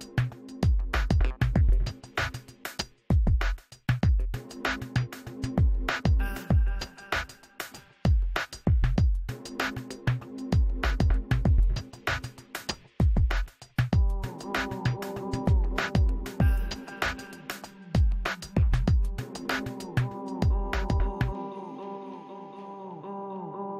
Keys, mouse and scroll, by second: 0.1-5.9 drag, 0.8 right click, 1.0-2.1 middle drag, 2.3 f, 2.9 middle click, 3.7 middle click, 4.9 middle click, 5.9-7.9 middle drag, 6.9-8.2 typing, 8.0 middle click, 8.7 click, 10.2-12.0 middle drag, 11.4 f, 11.8 f, 12.7 f, 12.9 click, 13.7-15.9 middle drag, 15.3 f, 15.7-17.3 drag, 17.2 middle click, 17.5 click, 18.1-19.6 middle drag, 19.3 click, 20.2 f, 20.9 f, 21.3 click, 22.0 middle click, 22.8 click, 23.5 middle click.